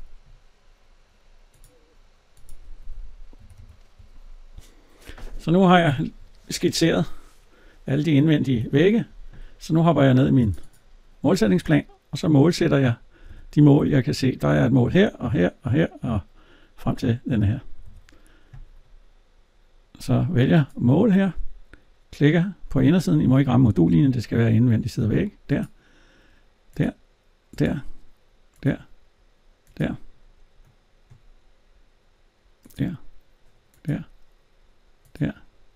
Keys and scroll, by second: 3.3 Escape, 6.8 alt+Tab, 13.0 alt+Tab.